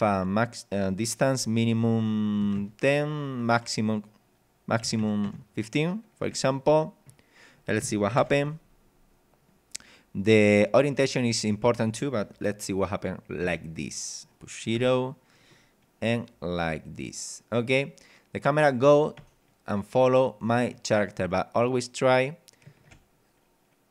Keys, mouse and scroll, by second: 2.4 KP_1, 2.6 KP_0, 2.9 click, 3.6 click, 4.8 KP_1, 5.0 KP_5, 5.3 KP_0, 6.3 BackSpace, 6.7 click, 8.2 ctrl+Up, 13.4 KP_0, 14.7 p, 19.2 w, 19.9 a.